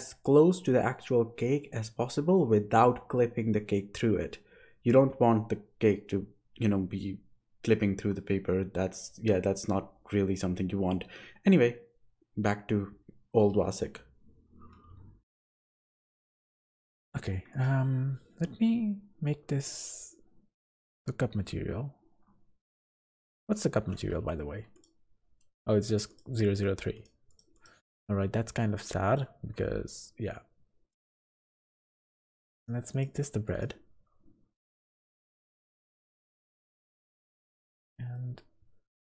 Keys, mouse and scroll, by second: 1.0 s, 3.6 Tab, 4.7-5.4 scroll up 9, 5.8-6.3 scroll down 4, 6.3 click, 6.8 Tab, 7.5 Tab, 7.8 Tab, 8.2 a, 8.8 alt+h, 9.4 alt+a, 9.8 3, 10.4 KP_1, 11.0 z, 12.2 b, 13.2 g, 14.1 Tab, 14.6 z, 15.1 middle click, 15.4-16.0 scroll down 6, 16.1 click, 16.4 click, 24.7 click, 26.1 click, 27.5 click, 32.0 click, 32.9 click, 35.4 middle click, 37.6 click, 38.1 middle click.